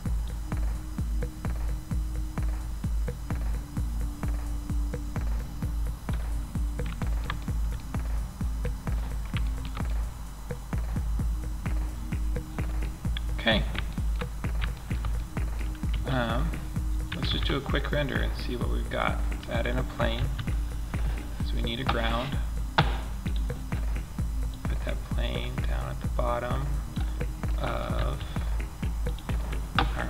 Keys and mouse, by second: 5.6-7.0 middle drag, 8.7 middle drag, 9.5-10.0 middle drag, 10.6 middle click, 10.9 middle drag, 11.1 middle click, 11.9 middle click, 12.5 middle click, 15.2 a, 16.6 shift+a, 19.4 s, 23.8-25.8 middle drag, 27.4 s.